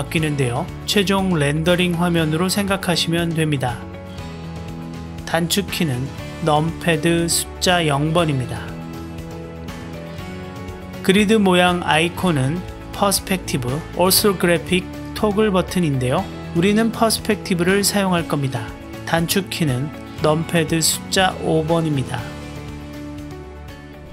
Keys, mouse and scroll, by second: 2.2 click, 4.9 KP_0, 6.7 KP_0, 10.1 click, 11.0 click, 13.9 click, 17.4 click, 20.7 KP_5, 22.4 KP_5.